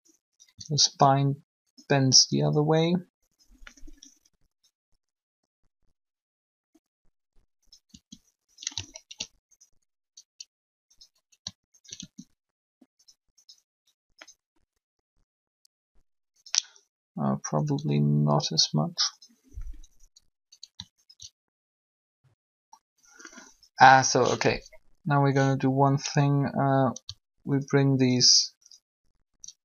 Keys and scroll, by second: 0.8 shift+r, 2.1 r, 7.9 r, 12.0 shift+r, 17.7 r.